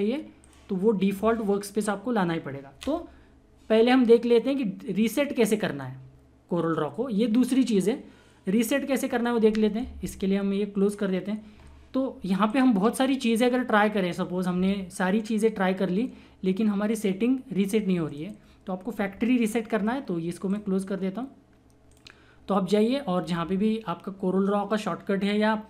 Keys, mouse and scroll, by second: 0.4 click, 12.5 click, 18.0 click, 20.4 click, 24.3 typing.